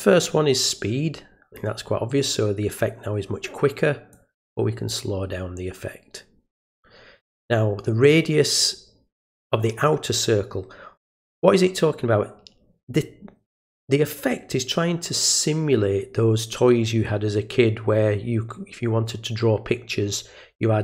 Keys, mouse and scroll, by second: 0.1-1.5 drag, 4.1-4.9 drag.